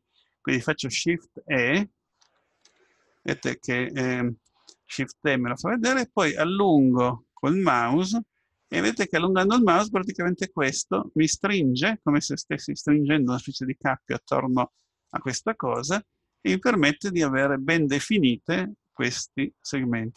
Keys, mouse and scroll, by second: 2.2 shift+e, 16.4-19.2 middle drag.